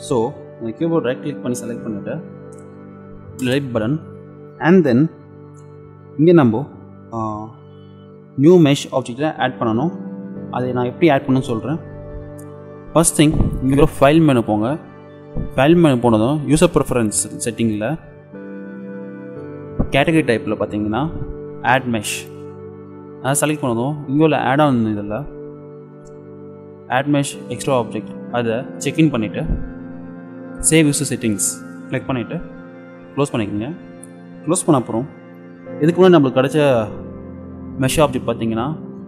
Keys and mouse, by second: 0.0-2.0 middle drag, 2.9 Delete, 14.3-16.4 drag, 35.9 shift+a.